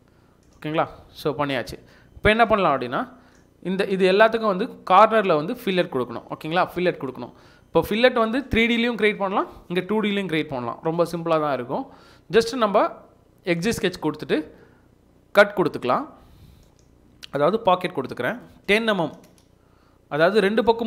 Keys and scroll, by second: 0.8 Escape, 1.1 Escape, 19.0 typing.